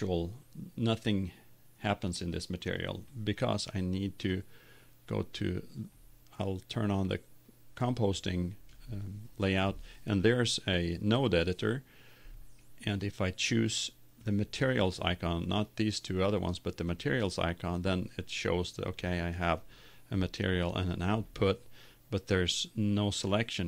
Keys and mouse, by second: 4.2 click, 5.8-7.3 middle drag.